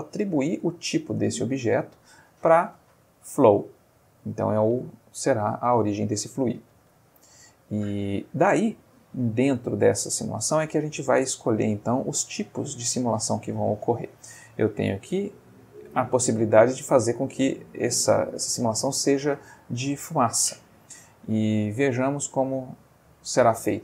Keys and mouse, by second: 1.7 click, 5.7 click, 7.9-8.5 middle drag, 17.0 space, 20.0 space, 22.0 click, 23.5 middle click.